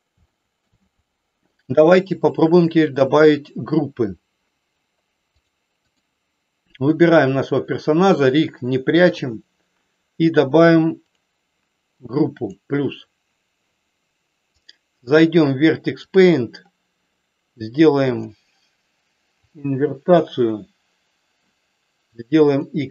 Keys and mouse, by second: 0.2 shift+middle click, 5.4 click, 6.9 click, 12.3 click, 14.7-16.3 drag, 18.2-19.8 drag, 22.5 click.